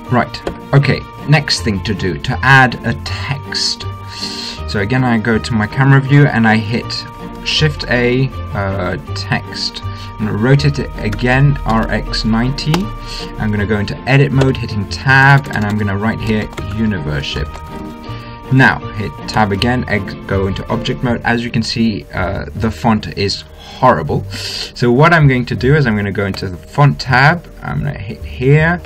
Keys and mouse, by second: 0.8 Escape, 8.0 shift+a, 11.6 r, 14.8 Tab, 15.6 BackSpace, 15.8 BackSpace, 16.8-18.2 typing, 19.7 Tab, 26.7-28.8 drag.